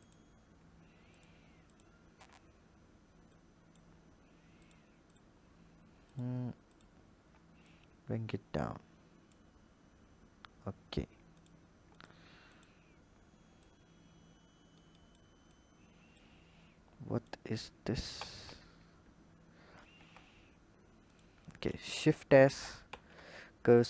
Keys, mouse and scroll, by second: 1.0 alt+click, 1.6 alt+click, 3.1 click, 4.4 alt+click, 4.9 alt+click, 5.9 alt+click, 6.5 alt+click, 7.5 click, 11.2 alt+click, 11.8 click, 12.4 alt+click, 13.5 click, 15.3 click, 17.0 click, 18.0 ctrl+z, 19.8 Tab, 20.9 click, 21.4 shift+a, 22.7 shift+s.